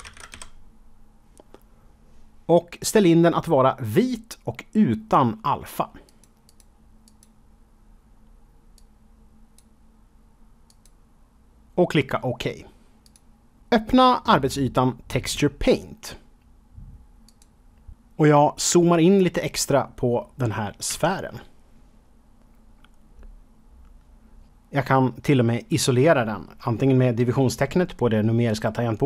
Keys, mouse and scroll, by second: 0.0-0.3 typing, 6.0 click, 6.4 click, 7.0 click, 8.7 click, 10.6 click, 13.0 click, 17.2 click, 20.8 KP_Decimal, 22.3-23.4 scroll up 4, 23.4 scroll down 1.